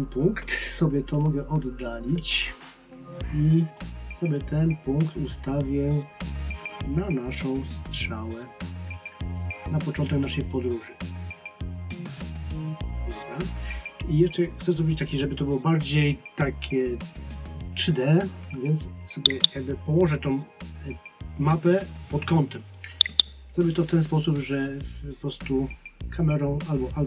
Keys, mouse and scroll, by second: 5.1 click, 26.2 click.